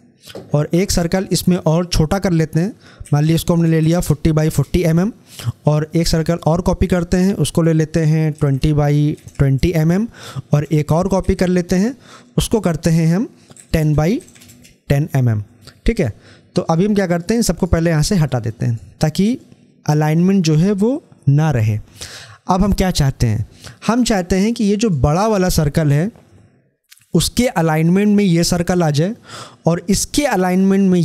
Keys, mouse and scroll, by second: 3.4 Tab, 6.1-22.1 drag, 24.6 click.